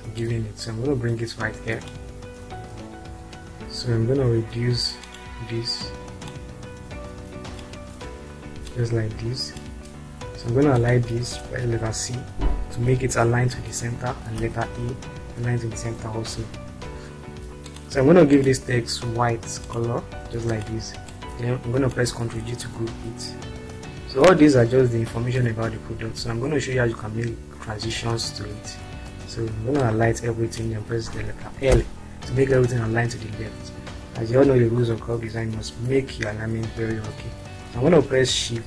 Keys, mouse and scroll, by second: 0.7-1.9 drag, 2.9-3.4 drag, 5.1 click, 6.3-7.6 drag, 8.9 click, 10.7 shift+click, 11.7 shift+c, 14.5 e, 17.6 ctrl+click, 20.2 click, 21.4-21.9 drag, 22.7 ctrl+g, 23.8-25.0 scroll down 3, 30.1-30.7 drag, 31.7 l.